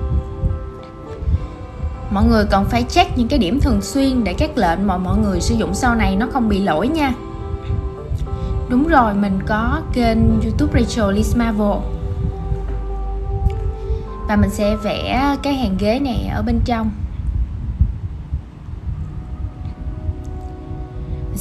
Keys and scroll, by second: 0.8 super+z, 11.4 super+x, 11.7 super+z, 11.8 shift+super+v, 13.5 super+z, 15.8 super+z, 19.3 super+z.